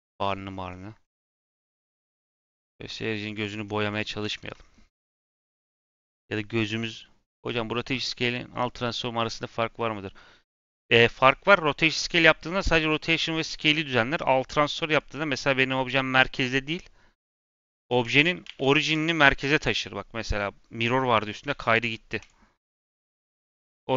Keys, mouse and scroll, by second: 0.4-0.7 scroll, 1.7-2.1 scroll, 3.3 click, 3.9-4.3 middle drag, 4.6-4.9 scroll, 5.1 click, 5.4-8.5 scroll down 1, 14.9-17.6 drag, 17.6 ctrl+a, 21.5 ctrl+z, 22.1 click, 23.3 click.